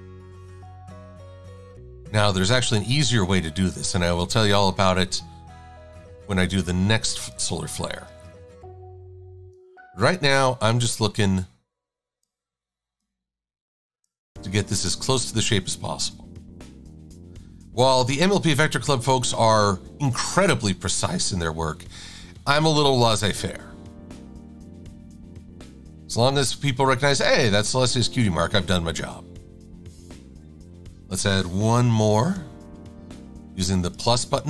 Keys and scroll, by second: 4.2 shift+c, 6.1 a, 8.3 shift+c, 10.3 a, 16.1 Down, 16.4 Right, 25.7 super+-, 26.1 shift+super+a, 31.9 =.